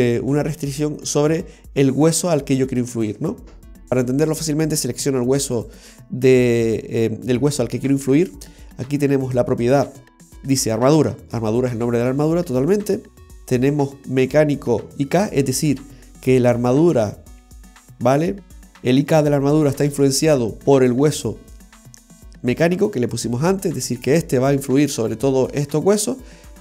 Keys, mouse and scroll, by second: 0.0 r, 1.1 right click, 3.9 right click, 5.3 r, 5.7 right click.